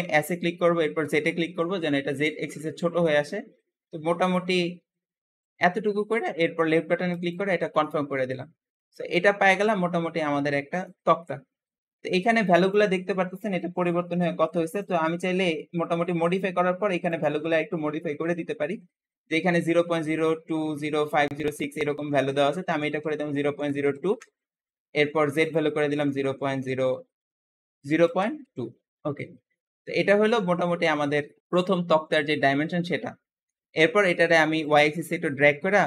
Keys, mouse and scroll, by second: 0.0 s, 7.7-10.7 middle drag, 11.0-12.5 scroll up 2, 12.5-14.7 drag, 17.0-20.1 drag, 25.3-28.4 drag, 30.1 scroll up 1, 30.1-32.0 middle drag, 34.5 click.